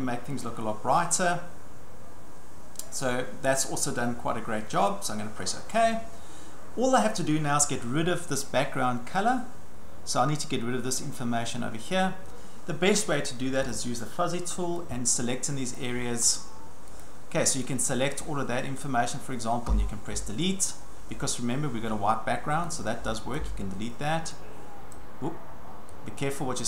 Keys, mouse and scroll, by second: 3.0 click, 5.4 click, 13.7 click, 15.7 click, 17.0 click, 19.7 Delete, 23.4 click, 23.9 Delete, 24.9 click.